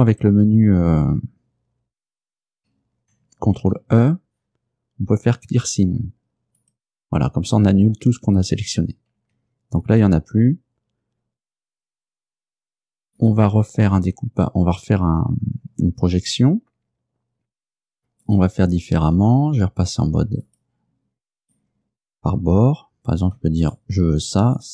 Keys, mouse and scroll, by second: 2.3 a, 3.6 ctrl+e, 6.7 click, 9.4 Tab, 13.2 right click, 18.3 right click, 18.6 middle click, 20.5 click, 21.5 right click, 23.7 shift+right click, 24.6 right click.